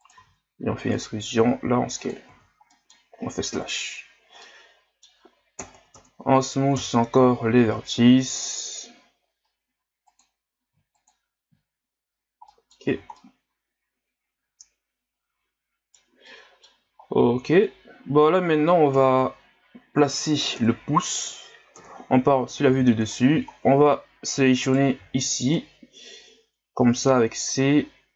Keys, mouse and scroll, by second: 2.7 middle click, 3.5 KP_Divide, 4.4-5.6 middle drag, 5.6 ctrl+KP_Add, 5.7 ctrl+KP_Add, 7.6 w, 10.7 w, 11.5 w, 12.5 middle click, 12.9 a, 13.1-16.2 middle drag, 16.3 middle click, 16.9 ctrl+scroll up 4, 19.0 KP_Divide, 20.6 KP_Divide, 21.7 KP_7, 22.7 z, 23.1 scroll up 2, 23.5-23.8 shift+scroll down 1, 24.6 right click, 25.0 c.